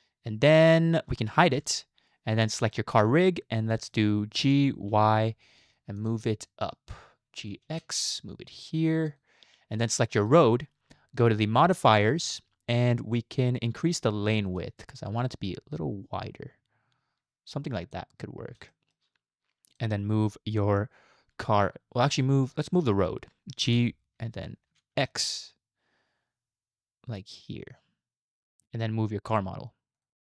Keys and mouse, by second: 1.6 h, 3.6-3.9 middle drag, 4.4 g, 6.4-6.9 shift+middle drag, 7.4 g, 12.0 click, 14.6-18.0 drag, 18.7 shift+middle click, 23.7 g.